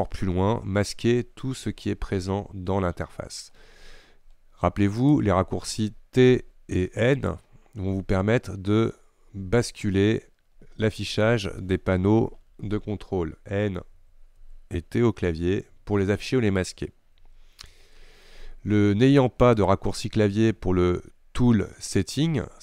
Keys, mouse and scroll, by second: 12.7-16.2 typing, 17.2 n, 17.7 t.